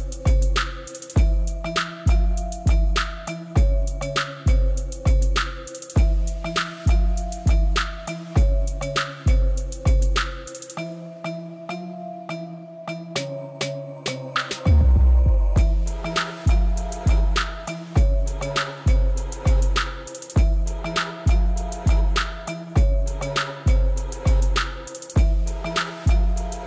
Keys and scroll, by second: 0.0-0.8 typing, 0.3 Return, 1.0 Return, 3.5 Tab, 8.8 shift+d, 9.0 y, 10.8 1, 10.9 0, 11.5 Return, 13.2 alt+r, 14.2 g, 14.8 z, 15.7 3, 16.9-18.6 typing, 21.1 3, 21.2 0, 21.3 Return, 22.4 g, 22.9 x, 25.0 1, 25.1 Return.